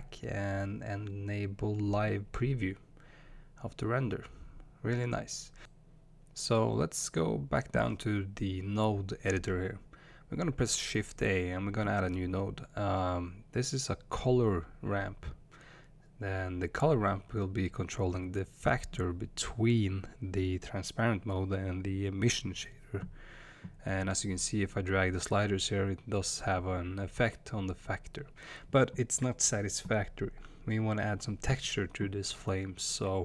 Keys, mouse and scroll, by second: 0.4-6.2 drag, 6.2-19.2 shift+middle drag, 19.2 click, 20.9-25.0 drag, 26.1-33.2 drag.